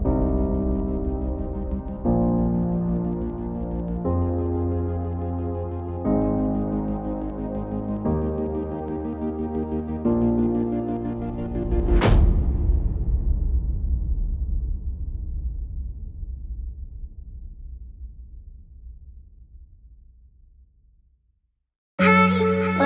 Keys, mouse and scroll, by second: 4.3 scroll down 1, 4.4 alt+scroll up 1, 4.6 alt+scroll down 1, 4.8 alt+scroll up 1, 6.6 alt+scroll down 1, 8.6 BackSpace, 9.8-10.2 typing, 11.8 typing, 12.5 double click, 13.0-13.9 typing.